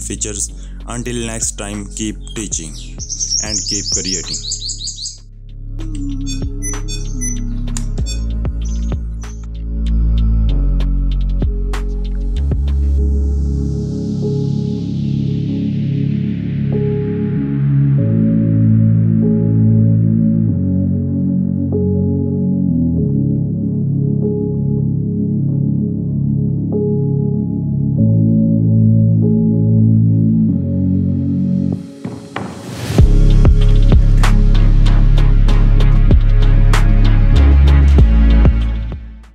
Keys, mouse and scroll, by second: 1.2 click, 2.3 right click, 3.6 click, 6.1 Return, 6.1 click, 6.2 right click, 6.3 click, 7.0 right click, 7.1 click, 7.3 End, 7.4 Home, 7.5 Page_Down, 7.6 Page_Up, 7.6 click, 7.8 Num_Lock, 7.9 click, 8.0 Num_Lock, 8.3 click, 8.4 Num_Lock, 8.6 Scroll_Lock, 8.7 right click, 8.8 click, 9.2 Caps_Lock, 9.2 right click, 9.3 click.